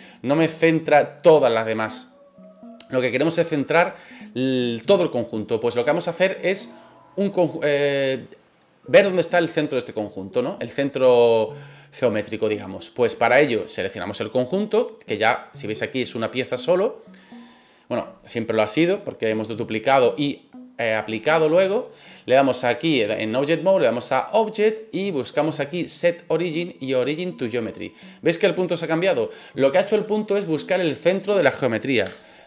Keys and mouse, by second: 24.3-27.5 drag, 32.0 KP_7.